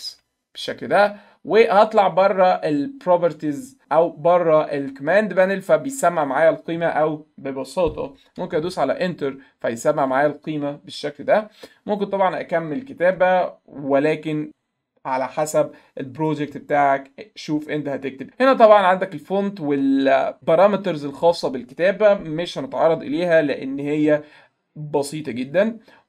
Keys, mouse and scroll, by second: 0.0-0.6 typing, 25.0 click.